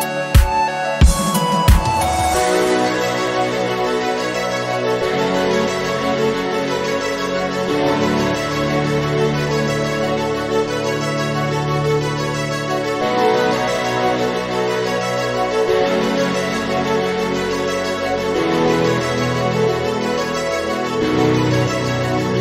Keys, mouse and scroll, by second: 1.1 g, 5.4 middle click, 6.1 KP_1, 7.0-10.6 drag, 14.0 click, 15.1-16.3 drag, 21.2 click, 21.4-21.8 scroll down 11, 22.0 click, 22.3 scroll down 1.